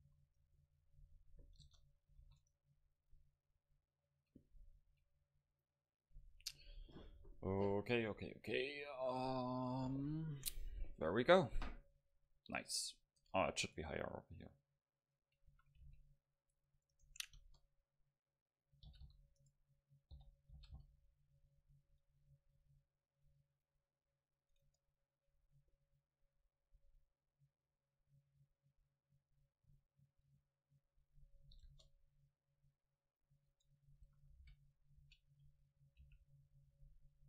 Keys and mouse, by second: 0.1 a, 0.6-3.1 middle drag, 1.7 KP_0, 2.3 ctrl+s, 5.3-9.1 middle drag, 13.3 Tab, 13.7 right click, 14.1-15.1 drag, 14.1 middle click, 15.1-16.7 middle drag, 15.6 a, 15.9 c, 17.1-18.4 drag, 17.4 KP_0, 18.9 g, 20.2 o, 20.6 g, 24.7 Tab, 24.7-26.4 drag, 25.5 Tab, 26.4-27.9 middle drag, 28.0 Tab, 28.5 middle click, 31.7 KP_0, 32.7-34.7 middle drag, 33.8 Tab, 34.1 a, 34.5 v, 35.1 v, 36.1 c.